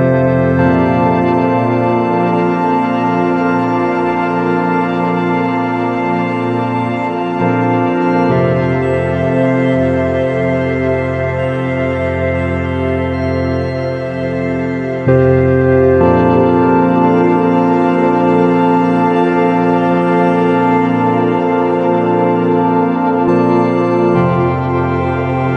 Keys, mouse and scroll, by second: 1.8 KP_1, 4.0 click, 5.0 click, 5.8-8.0 middle drag, 10.2 shift+d, 12.1-14.1 drag, 14.1 r, 17.2-19.0 drag, 19.2-21.7 middle drag, 21.4-23.2 drag, 23.8 KP_3.